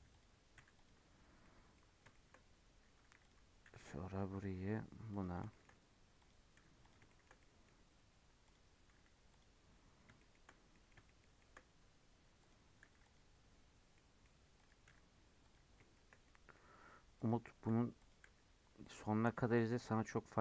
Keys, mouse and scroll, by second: 0.1 click, 0.5 g, 1.4 middle click, 1.8-3.0 scroll up 6, 2.1 shift+middle click, 3.0 2, 3.2 click, 3.6 g, 5.4 shift+middle click, 6.1 click, 6.5 g, 7.0-8.4 shift+middle drag, 8.4 click, 8.9 g, 9.9 scroll down 2, 10.1 shift+middle click, 10.4 scroll down 3, 10.7-11.7 middle drag, 11.7-12.3 scroll up 1, 12.3 click, 12.8 g, 13.9 middle click, 14.5 click, 14.8 g, 15.9-17.1 shift+middle drag, 17.1 click, 17.6 g, 18.2 g, 19.3-20.4 shift+middle drag.